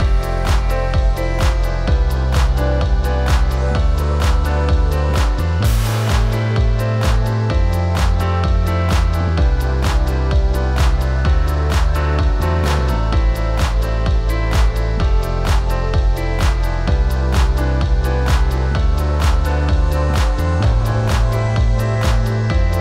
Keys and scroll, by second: 18.7 Up, 20.0 Down, 21.2 Up.